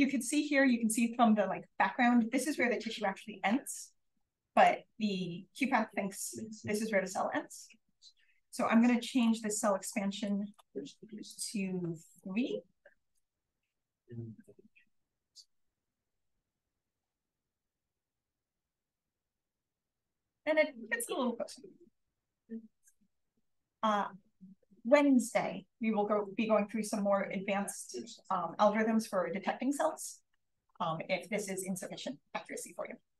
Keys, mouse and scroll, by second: 1.5-2.1 scroll down 1, 2.1-3.2 scroll down 1, 3.2-3.8 scroll down 1, 3.8-4.3 scroll down 1, 4.3 click, 4.4 click, 9.0 click, 10.2 click, 11.2 click, 12.9 BackSpace, 13.9 3, 14.7 click, 16.3 click, 17.6 click, 19.8 Down, 20.6-21.7 scroll down 1, 21.7 scroll down 1, 21.7 click, 22.2-23.3 scroll down 1, 23.0 click.